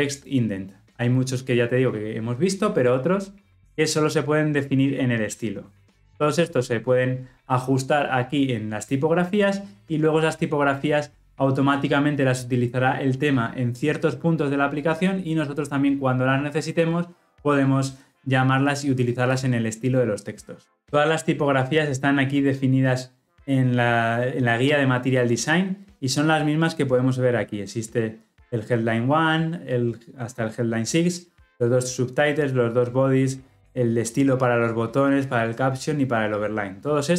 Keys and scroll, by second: 3.3 ctrl+alt+Left.